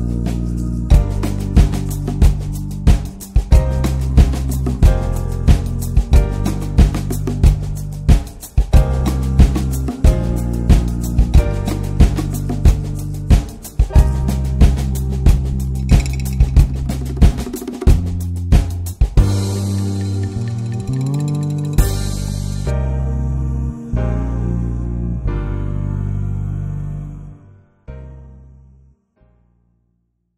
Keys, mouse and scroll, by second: 1.7 ctrl+s, 3.6-10.9 middle drag, 10.9 ctrl+s, 11.4-12.0 middle drag, 12.0 click, 12.4 scroll down 2, 12.6 middle click, 13.0-14.1 scroll up 1, 14.1-14.5 scroll up 1, 14.5-17.5 drag, 18.6 ctrl+shift+click, 19.1 middle click, 19.6 scroll down 1, 19.8-20.2 middle drag, 20.2-20.7 ctrl+shift+drag, 20.7-21.7 middle drag, 21.7 ctrl+shift+click, 22.0-23.7 middle drag, 23.7-24.0 scroll down 2, 24.0 ctrl+s, 25.3-26.6 middle drag, 26.2 ctrl+s, 26.6 scroll up 1, 26.8 middle click, 27.5 ctrl+s.